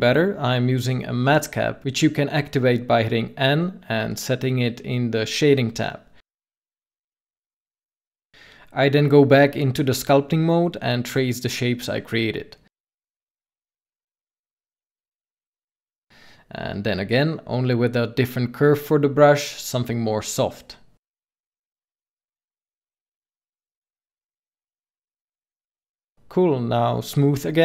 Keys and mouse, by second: 4.5 middle click, 5.4 middle click, 5.9 KP_7, 8.2 Tab, 9.4 click, 10.4 f, 11.3 click, 13.9 click, 15.6 click, 16.5 ctrl+z, 16.9 f, 18.6 ctrl+z, 23.6-24.6 drag, 25.1-26.5 drag, 26.5 f, 27.0-27.6 drag.